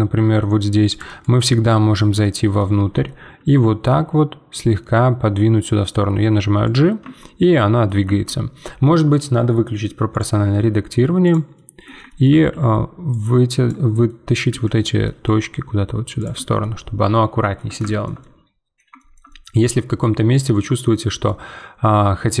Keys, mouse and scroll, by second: 2.5 middle click, 2.7 z, 3.0 middle click, 3.9 g, 7.0 Tab, 7.4 middle click, 8.0 Tab, 10.1-11.5 drag, 11.5 middle click, 12.5 z, 13.1 click, 14.0 middle click, 14.5 z, 14.8 middle click, 15.2 g, 16.3 Tab, 16.6 middle click, 17.6 scroll down 1, 17.9-20.9 shift+middle drag, 20.9-21.2 scroll down 2, 21.2-22.4 middle drag.